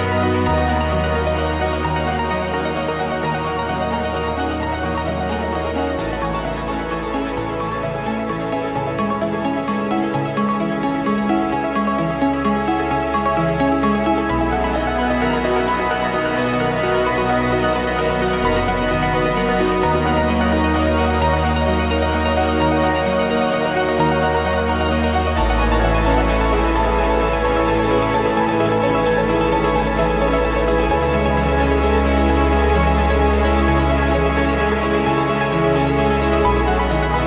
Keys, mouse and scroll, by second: 0.2 click, 0.6 click, 1.2 click, 2.7 click, 3.4 right click, 5.0 click, 6.2 click, 13.6 click, 14.8 click, 15.6 click, 16.0 click, 16.7-19.5 drag, 20.1 0, 21.0 scroll down 2, 21.8-26.0 drag, 25.8 0, 27.3 click, 28.8-31.0 drag, 31.6 click, 31.9 click, 32.8 click, 34.0 click, 35.6-37.2 drag.